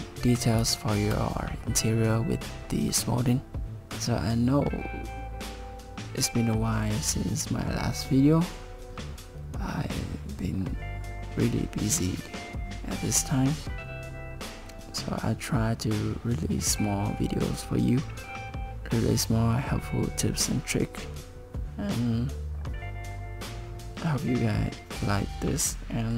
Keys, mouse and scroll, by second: 0.8 shift+middle click.